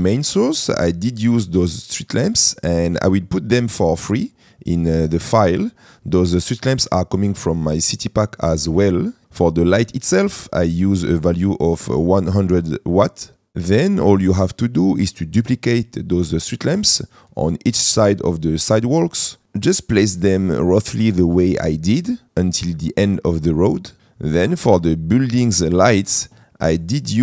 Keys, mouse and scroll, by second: 10.4 middle click, 15.0 shift+middle click, 18.5 middle click.